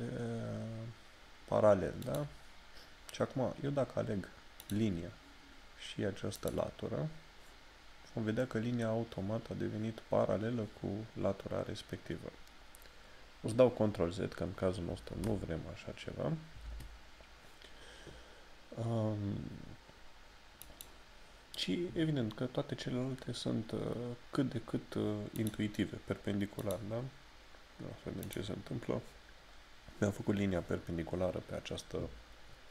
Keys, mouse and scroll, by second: 2.2 click, 4.6 click, 20.6 click, 25.4 click, 29.5 scroll down 1.